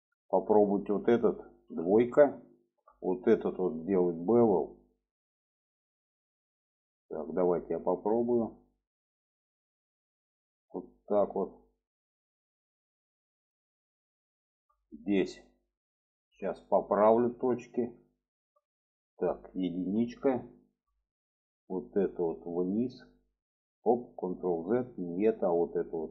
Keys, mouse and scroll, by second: 0.4-1.7 middle drag, 1.7 2, 3.2-4.7 middle drag, 6.4 click, 7.4-12.1 drag, 12.1-14.0 middle drag, 15.0 alt+middle click, 16.0 alt+middle click, 16.6 shift+middle click, 17.4 click, 18.3 shift+middle click, 19.8 1, 20.5 shift+middle click, 21.5 click, 22.3-23.3 drag, 24.0 ctrl+z, 24.5 click, 25.5 click.